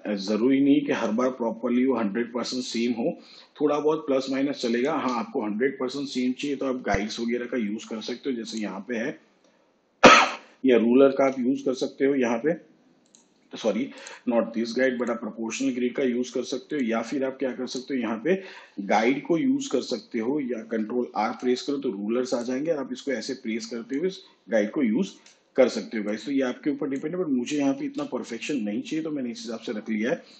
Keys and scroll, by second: 12.6 ctrl+r, 22.6 ctrl+r, 29.2 ctrl+r.